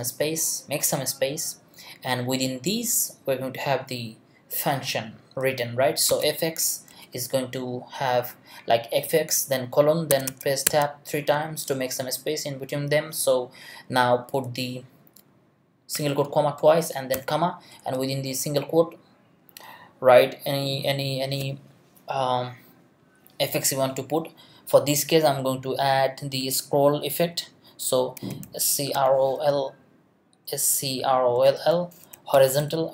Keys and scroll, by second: 5.9-7.5 typing, 10.1 Tab, 17.7 Left, 27.9-29.3 typing, 30.7-32.0 typing.